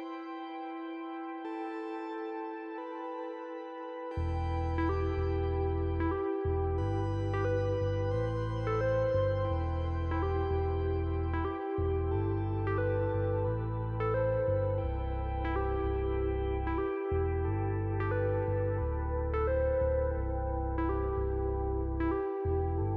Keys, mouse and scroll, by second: 0.0-0.9 typing, 0.5 click, 4.6 click, 9.0 click, 12.8 click, 13.6 click, 14.7-15.8 typing, 14.9 click, 15.8 click, 16.5 click, 17.8 right click, 20.2 right click, 21.7 click.